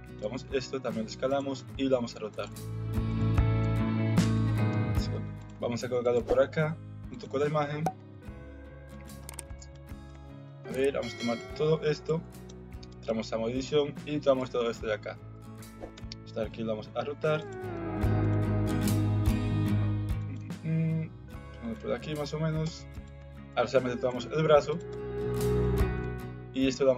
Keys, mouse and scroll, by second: 0.4 s, 1.6 r, 2.5 s, 3.6 g, 5.5 s, 6.1 g, 7.9 g, 9.2 Tab, 9.7 Tab, 10.1 alt+z, 10.4 Tab, 11.3 shift+click, 12.0 shift+click, 12.9 Tab, 13.6 alt+z, 14.5 click, 16.0 r, 17.7 g, 18.7 r, 20.3 g, 22.6 Tab, 23.2 Tab, 23.6 alt+z, 24.0 alt+z, 24.5 alt+z, 24.6 click, 24.9 Tab, 25.6 Tab, 26.0 alt+z, 26.8 s.